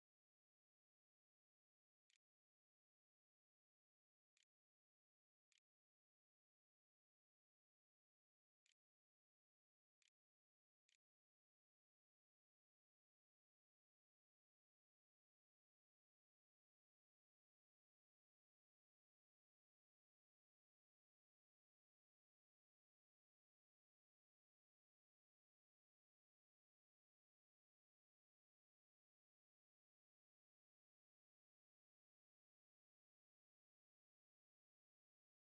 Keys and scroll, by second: 0.4-1.4 typing, 1.9 Return, 2.4-3.3 typing, 4.8 ctrl+c, 5.0 ctrl+v, 6.8-7.9 typing, 8.9 shift+Return, 9.1-12.2 typing, 10.4 Return.